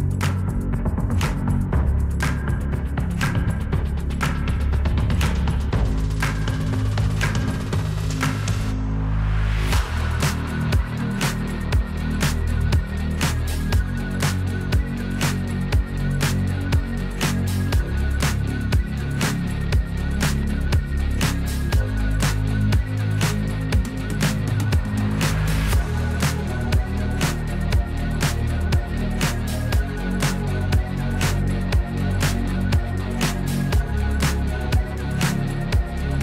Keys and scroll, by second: 1.8 \, 3.0 \, 5.3 m, 11.5 \, 20.6 m, 23.1 F3, 26.6 Escape.